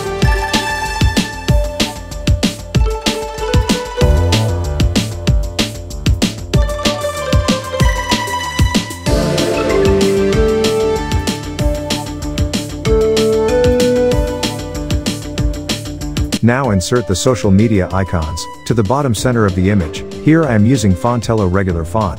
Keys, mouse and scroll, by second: 1.3 click, 5.2 click, 6.8-9.5 drag, 11.2 alt+scroll down 1, 11.8 alt+scroll up 1, 12.4 alt+scroll up 1, 12.6 space, 12.7-13.1 click, 13.1 space, 13.6 click, 13.7-14.2 alt+scroll down 1, 14.7 click, 18.2 Down, 18.4 Return, 20.5 click.